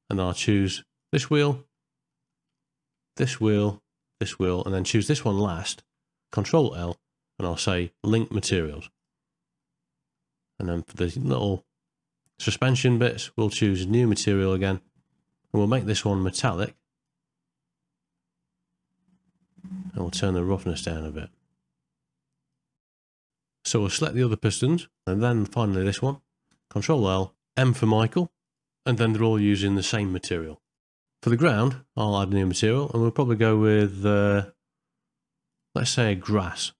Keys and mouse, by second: 1.0 click, 1.4 middle click, 2.1 middle click, 4.1 shift+click, 6.7 ctrl+l, 9.7 middle click, 11.2 click, 11.9 ctrl+middle click, 12.8 shift+middle click, 16.5 click, 18.2-19.5 middle drag, 20.9-22.5 drag, 22.8 middle click, 23.0 ctrl+middle click, 23.2 shift+middle click, 23.3 middle click, 23.8 shift+middle click, 23.9 ctrl+middle click, 24.1 middle click, 26.9 ctrl+l, 29.2 middle click, 30.5 shift+middle click, 30.7 middle click, 31.0 ctrl+middle click, 32.5 click, 33.1 click, 34.0 middle click, 35.5 click.